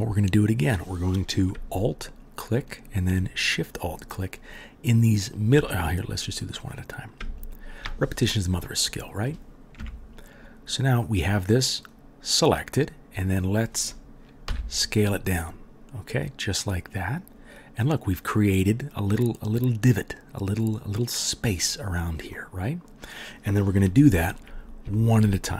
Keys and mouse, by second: 0.4 click, 2.1 alt+middle click, 2.2-3.7 alt+drag, 3.7 alt+shift+middle click, 3.8-6.7 alt+shift+drag, 6.7 middle click, 6.8 click, 7.4 alt+middle click, 7.5-25.5 alt+drag, 9.7 KP_Decimal, 14.4 s.